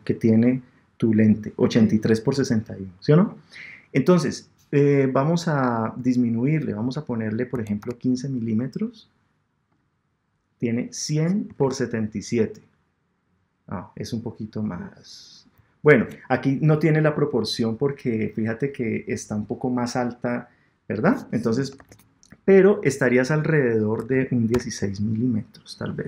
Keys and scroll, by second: 11.6 super+Tab, 21.8 super+Tab.